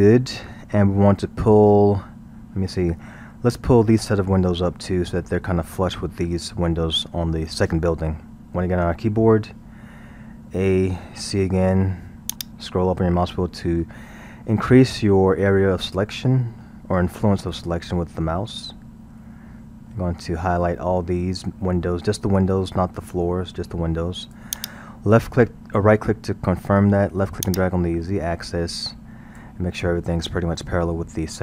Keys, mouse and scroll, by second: 8.8 KP_1, 10.4 a, 11.1 c, 27.5-30.5 drag.